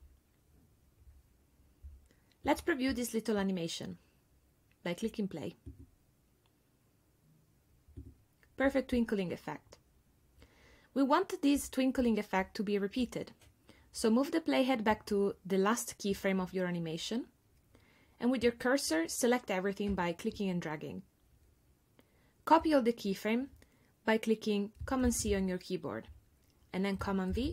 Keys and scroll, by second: 25.1 super+c, 27.3 super+v.